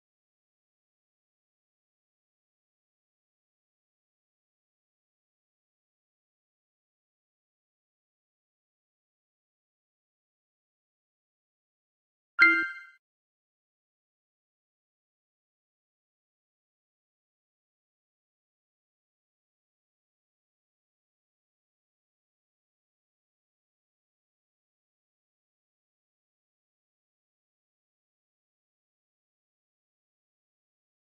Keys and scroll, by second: 0.2 ctrl+z, 2.0-8.5 typing, 8.4 alt+o, 12.6 alt+o, 12.8 s, 14.4-15.3 typing, 16.3 alt+o, 16.4 b, 16.8 s, 18.8-23.9 typing, 21.8 ctrl+z, 23.7 alt+o, 24.4 ctrl+z, 25.3 alt+o, 25.4 s, 27.5 a, 28.6 v, 29.5 alt+o, 29.6 s.